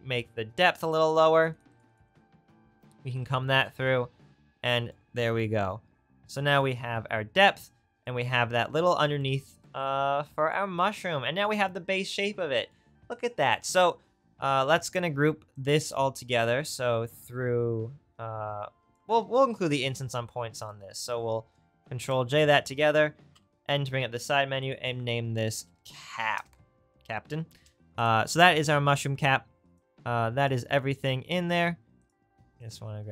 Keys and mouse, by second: 7.6 click, 22.0 ctrl+j, 23.3 n, 31.4 click, 32.2 right click, 32.6-33.1 drag.